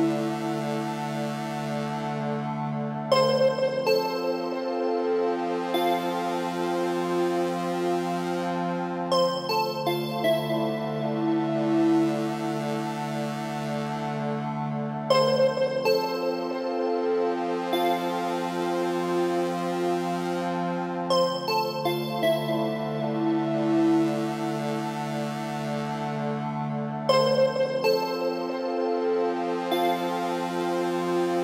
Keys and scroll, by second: 1.7 Right, 28.1 Return.